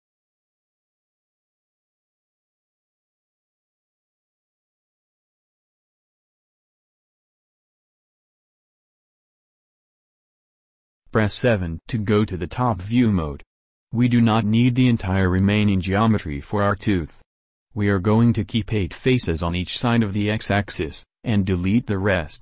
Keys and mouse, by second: 0.3-1.6 middle drag, 4.6-7.9 middle drag, 4.6 x, 11.2 KP_7, 12.1-14.4 middle drag, 16.2-22.4 middle drag.